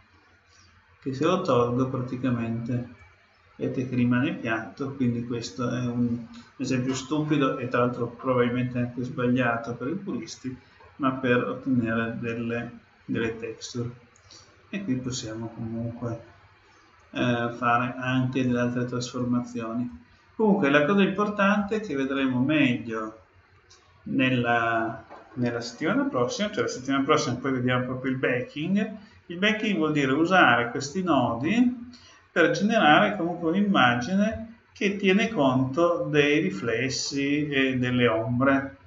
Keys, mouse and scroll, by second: 1.5-3.3 drag, 10.7-12.6 middle drag, 15.0-16.8 drag, 18.4-21.8 drag, 22.1-24.0 drag, 34.7-37.2 middle drag.